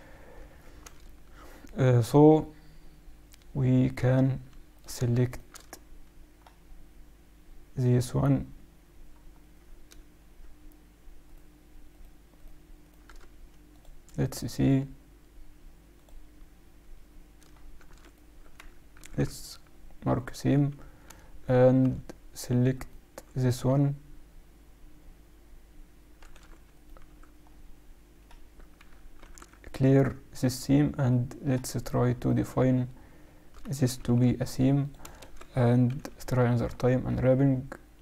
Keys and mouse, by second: 0.0 click, 0.9 a, 4.7-7.2 right drag, 7.2-9.2 middle drag, 9.3-11.4 middle drag, 11.4-13.8 right drag, 16.9-18.6 middle drag, 17.8 a, 18.1 right click, 19.0 ctrl+e, 19.6 right click, 21.1 a, 21.8 a, 22.8-24.8 right drag, 26.2 a, 26.8 right click, 27.7 middle click, 28.0 right click, 28.7-31.1 middle drag, 29.2 ctrl+e, 32.2-34.0 right drag, 34.0 ctrl+e, 35.0 a, 35.2 a, 35.9 u, 36.9 middle click.